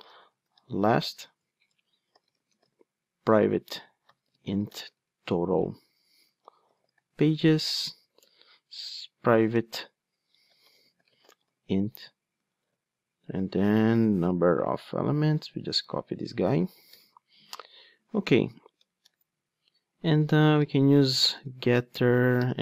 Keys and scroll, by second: 17.0 super+v.